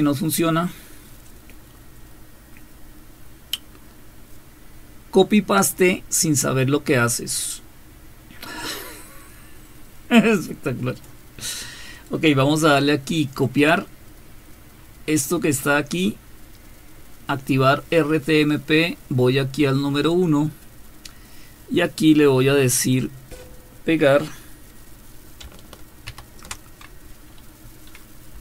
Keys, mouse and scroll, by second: 1.3-11.1 drag, 15.2-16.2 scroll up 1, 16.2-17.0 scroll up 1, 17.0-18.7 scroll up 1, 20.1 click, 26.1 ctrl+v, 28.3 Up.